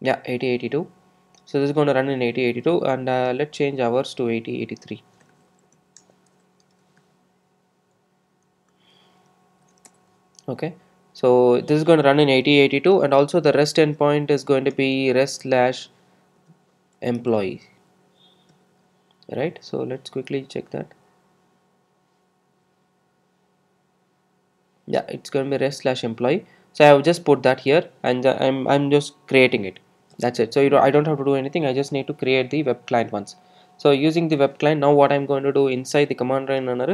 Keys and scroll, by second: 9.9 super+e.